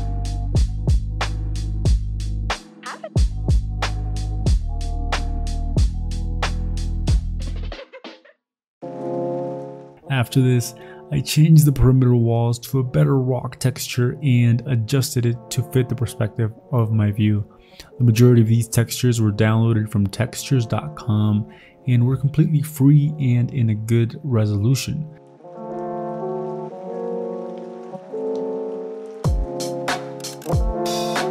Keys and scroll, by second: 0.6-2.1 typing, 4.6 ctrl+i, 4.6-5.9 typing, 9.3 Delete, 9.4 Delete, 12.9-13.8 typing, 16.8 alt+Tab, 17.6 alt+Tab, 18.4 ctrl+j, 18.7 ctrl+t, 19.9 ctrl+t, 21.4 w, 21.6 ctrl+d, 24.1 ctrl+i, 24.1-27.0 typing, 29.7 v, 30.3 ctrl+i, 30.9-31.3 typing.